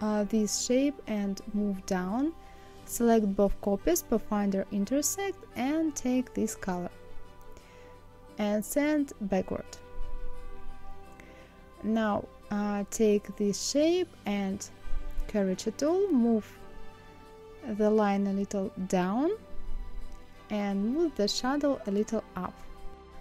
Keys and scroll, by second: 18.3 Up, 19.4 Down.